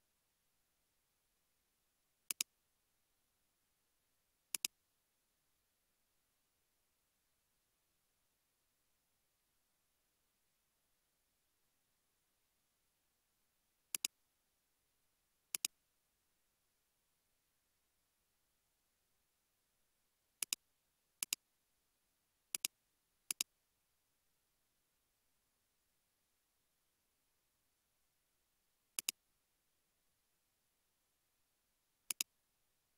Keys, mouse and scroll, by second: 0.3-1.1 scroll up 1, 1.1-3.0 scroll down 1, 3.3 scroll up 1, 4.2-5.5 scroll down 1, 5.7-6.4 scroll up 1, 6.6 s, 17.0 s, 25.9-27.7 typing, 29.4-31.2 typing, 32.6-32.9 typing.